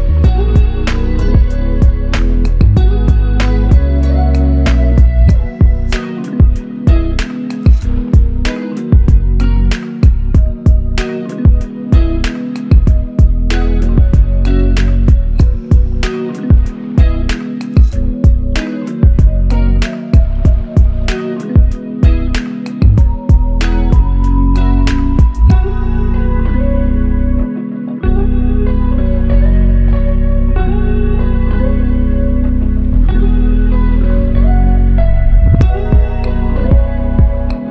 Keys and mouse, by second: 0.6 double click, 4.1 shift+click, 6.3 alt+shift+click, 10.7 double click, 11.6 alt+click, 14.0 f, 15.6 alt+shift+click, 18.7 shift+click, 20.1 shift+click, 24.8 shift+click, 31.4 Return, 33.7 ctrl+alt+click, 37.1 alt+click, 37.5 alt+double click.